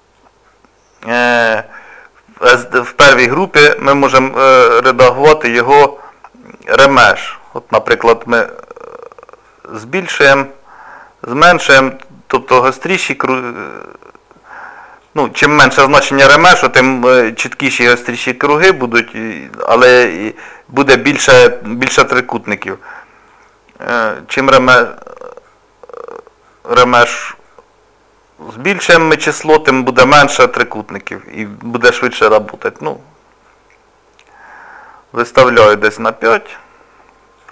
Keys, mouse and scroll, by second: 4.0 middle click, 7.4 shift+click, 16.5 middle click, 18.7 shift+click, 23.3 shift+click, 30.7 middle click, 32.5 shift+click.